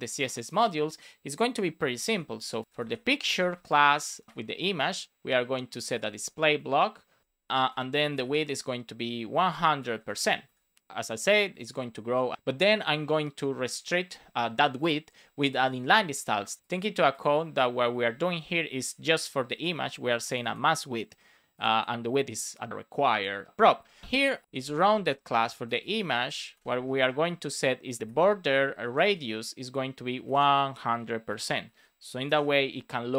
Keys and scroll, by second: 2.6-4.2 typing, 4.4 Return, 5.4 Return, 6.5 Return, 7.2 Return, 7.4 Right, 7.6 Return, 8.7 Return, 9.8 shift+5, 10.4 Right, 11.9 Down, 12.3 Return, 15.6 super+s, 25.0 space, 25.6 BackSpace, 26.4 space, 26.7 shift+[, 26.9 Return, 27.9 Return, 28.7 Down, 29.0 Return, 30.0 Return, 31.2 shift+5, 31.5 super+s, 32.2 alt+shift+f, 32.5 super+s.